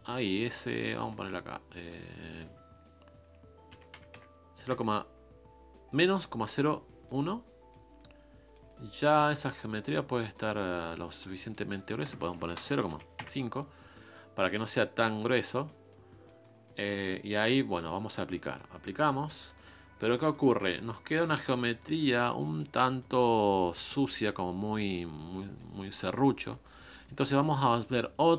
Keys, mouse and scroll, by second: 7.0-14.3 middle drag, 15.2-16.4 middle drag, 16.4 scroll down 2, 16.6 middle click, 17.0 scroll up 1, 17.2-21.3 middle drag, 21.3 ctrl+space, 21.5-21.8 scroll up 1, 21.8 shift+middle click, 22.6-23.0 scroll up 3, 23.0-24.4 middle drag, 24.4-24.8 scroll down 2, 24.8-26.5 middle drag, 26.5-26.8 scroll down 1, 26.8-28.0 middle drag, 28.0 scroll down 3, 28.2 middle click.